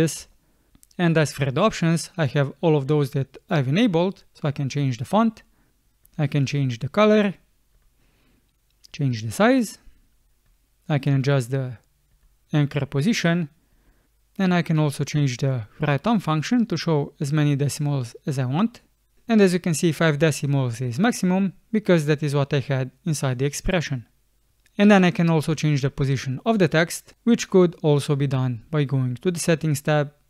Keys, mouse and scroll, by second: 0.3 space.